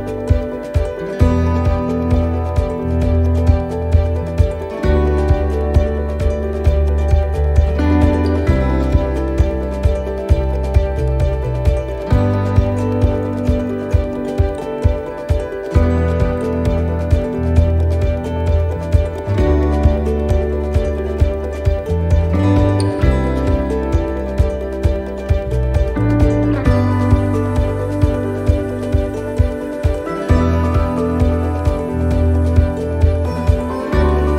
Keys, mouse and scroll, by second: 0.8 middle click, 1.0 shift+middle click, 1.3-1.7 scroll up 3, 1.7 shift+middle click, 2.1 middle click, 2.6-3.2 scroll down 2, 3.0 middle click, 3.8 scroll down 2, 4.1 middle click, 4.8 shift+middle click, 5.2 middle click, 6.2 shift+middle click, 7.5 a, 8.3 u, 11.6 click, 12.5 click, 19.5 middle click, 21.2 scroll up 2, 21.7 middle click, 22.1 shift+middle click, 22.7 middle click, 23.5 middle click, 23.6 shift+middle click, 24.0-24.4 scroll down 2, 24.3 middle click, 24.8-25.4 scroll up 2, 25.3 middle click, 26.1 click, 26.8 right click, 27.7 middle click, 30.1 middle click, 31.7 middle click, 32.6 shift+d, 33.2 middle click.